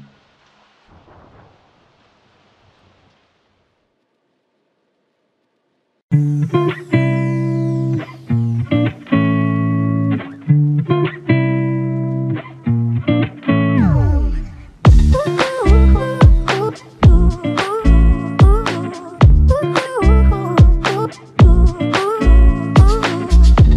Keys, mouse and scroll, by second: 2.1 alt+click, 5.1 alt+click, 8.0 double click, 8.5 alt+click, 11.4 alt+click, 13.5 alt+shift+click, 14.8 r, 19.0 f, 19.9 double click.